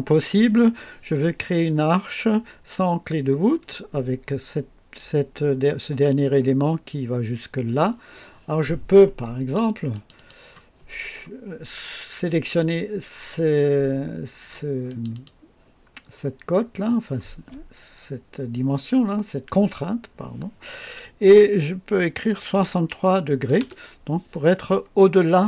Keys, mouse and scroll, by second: 9.9 click, 14.8 click, 22.2 KP_6, 22.5 KP_3, 23.5 KP_Enter.